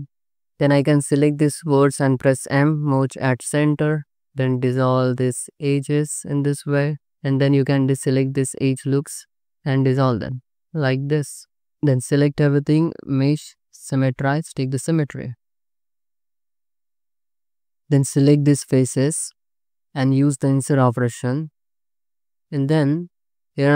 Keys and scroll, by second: 0.2 1, 1.6 m, 3.5 m, 4.0 2, 6.2 ctrl+x, 6.7 Tab, 7.1 2, 10.2 ctrl+x, 11.3 ctrl+x, 11.7 Tab, 12.0 a, 14.9 Tab, 16.2 2, 17.1 3, 19.7 i, 22.4 alt+z.